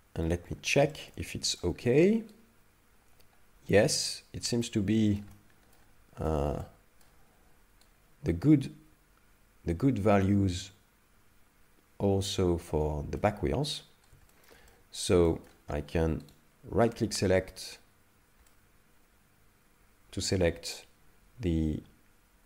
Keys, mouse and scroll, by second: 0.5-0.9 scroll up 2, 0.9 shift+middle click, 1.3 middle click, 2.4 right click, 4.5 ctrl+middle click, 5.3 middle click, 6.3 shift+middle click, 6.6 middle click, 7.9 right click, 13.2 middle click, 13.9-14.5 scroll down 3, 14.3 shift+middle click, 14.7 middle click, 15.3 shift+middle click, 16.3 shift+right click, 18.5 middle click.